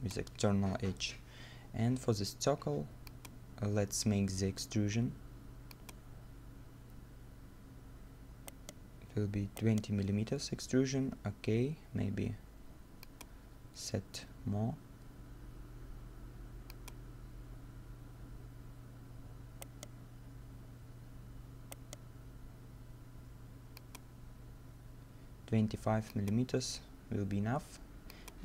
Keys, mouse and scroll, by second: 4.3 middle click, 8.5 right click, 9.3 middle click, 9.6 right click, 18.6-19.6 scroll up 1, 19.6 right click, 20.6 scroll down 1, 21.0 scroll up 1, 21.7 right click.